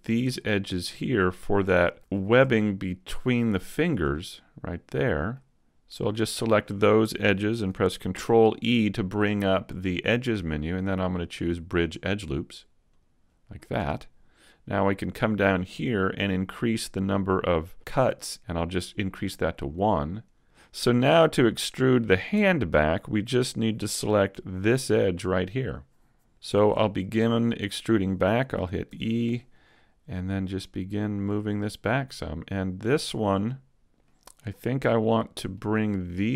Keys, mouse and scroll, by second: 0.0 shift+right click, 0.4 middle click, 1.4 shift+right click, 2.3 super+z, 2.6 shift+right click, 3.6 shift+right click, 4.1 middle click, 5.9 middle click, 8.0 ctrl+e, 15.2 click, 19.7 click, 20.6-21.6 scroll down 3, 22.3 Tab, 23.4 a, 24.4 alt+right click, 25.0 middle click, 26.3 middle click, 26.3-26.8 scroll down 1, 26.8 shift+middle click, 27.2 middle click, 28.8 e, 29.4 click, 31.5 click, 31.5 middle click, 34.6 middle click, 34.6-35.3 scroll up 2, 35.0 middle click, 36.1 right click.